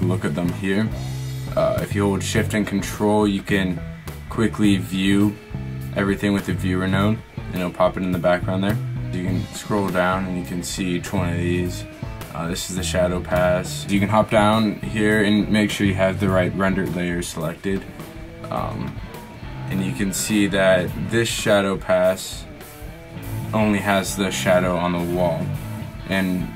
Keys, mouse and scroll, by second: 5.3-9.1 drag.